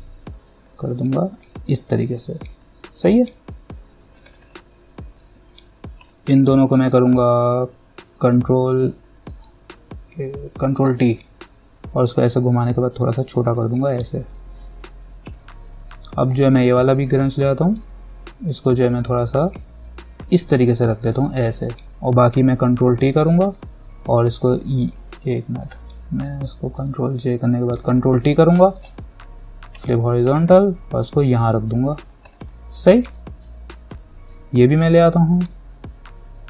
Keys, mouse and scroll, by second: 6.3 ctrl+click, 11.1 ctrl+t, 12.0 click, 12.9-18.9 alt+drag, 18.9-21.5 alt+drag, 23.0 ctrl+t, 24.3 click, 25.4 ctrl+z, 25.8 click, 27.0 ctrl+j, 28.0 ctrl+t, 29.0 right click, 30.0-36.4 drag.